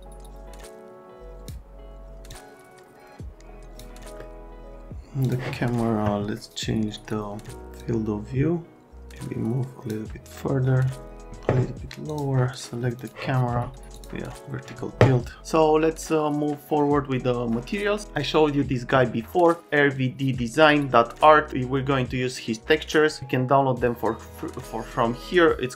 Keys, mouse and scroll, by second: 2.3 click, 4.2 middle click, 5.2 click, 7.7-9.6 drag.